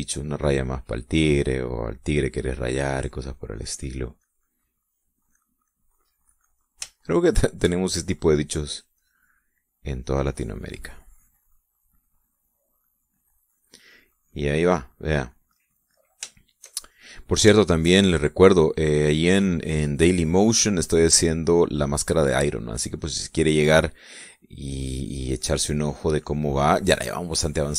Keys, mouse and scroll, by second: 1.1 middle click, 3.4-5.9 drag, 6.0-7.6 middle drag, 7.7-8.9 shift+middle drag, 9.3-10.5 drag, 10.6-16.2 drag, 16.3-17.0 middle drag, 17.1-17.9 shift+middle drag, 18.2-19.2 shift+middle drag, 21.5-23.6 drag, 23.7 middle click, 25.5-27.7 drag.